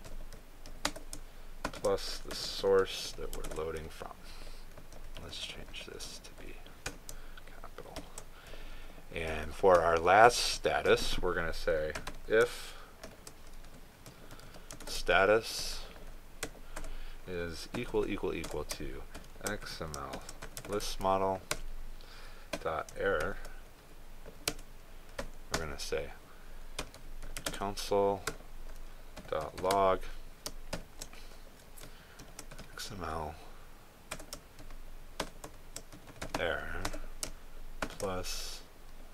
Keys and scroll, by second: 4.4 ctrl+space, 15.8 ctrl+space, 21.6 ctrl+space, 28.5 ctrl+space.